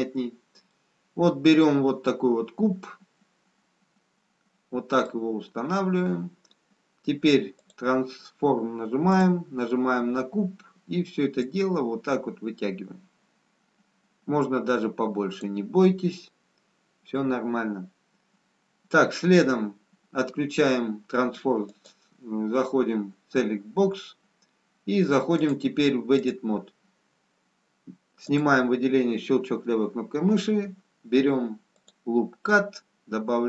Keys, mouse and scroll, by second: 3.2 middle click, 5.8 scroll up 2, 7.5 click, 9.1 click, 11.4 click, 17.1 scroll down 1, 21.7 click, 25.3 click, 28.9 click, 31.7 click.